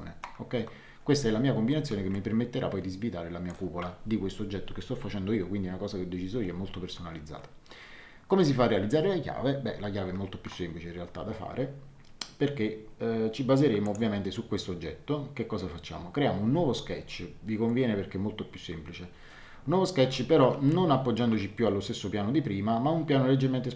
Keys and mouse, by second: 2.1 shift+middle click, 13.8 click, 20.6 shift+middle click.